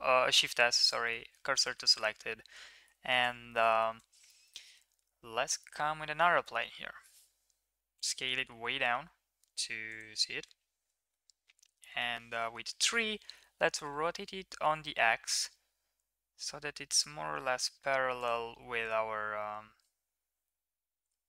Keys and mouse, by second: 1.4 Tab, 1.6 shift+middle drag, 1.9 middle click, 2.8 KP_1, 3.5 shift+middle click, 3.9 shift+a, 6.4-7.1 drag, 7.8 s, 11.5 KP_3, 12.8 shift+middle click, 13.6 r, 19.8 s.